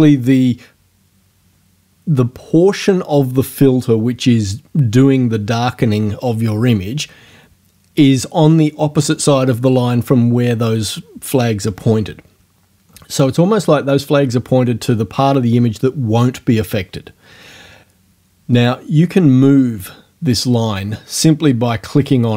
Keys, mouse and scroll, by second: 21.7-22.3 drag.